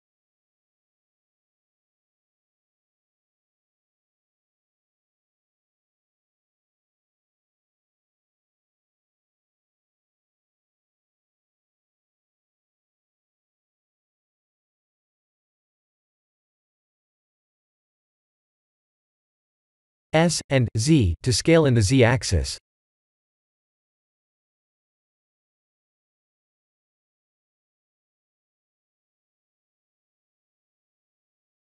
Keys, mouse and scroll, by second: 0.2 s, 1.2 g, 3.6 s, 6.5 s, 9.1 Tab, 9.7 ctrl+r, 12.7 click, 15.3 Tab, 15.9 s, 19.0 middle click, 20.1 s, 22.4 middle click, 23.5 right click, 24.5 middle click, 28.5 middle click, 29.1 s, 30.4 g.